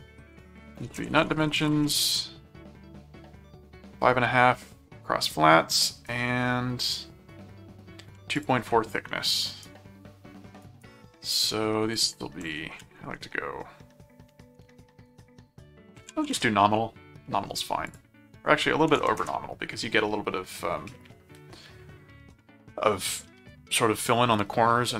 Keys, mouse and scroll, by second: 0.3-2.0 typing, 8.3 ctrl+click, 8.6 ctrl+w, 9.4 right click, 10.6 right click, 11.9 click, 17.8 click.